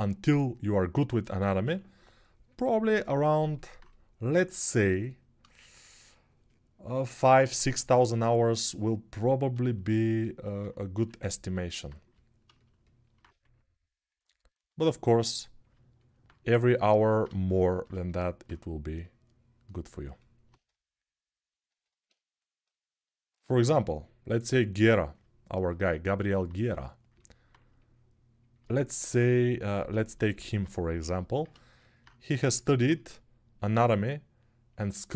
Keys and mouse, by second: 1.4 6, 10.7 1, 13.1 1, 15.5-19.8 alt+right drag, 19.8-29.7 drag, 29.7-31.5 alt+shift+right drag, 31.5-35.1 alt+drag.